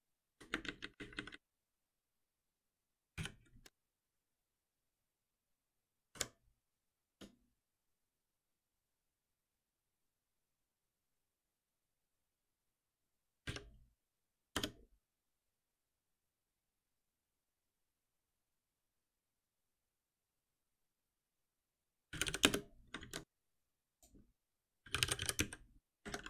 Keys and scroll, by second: 3.1 ctrl+alt+p, 13.5 F6, 22.4 Return, 23.0 ctrl+s, 26.0 Escape.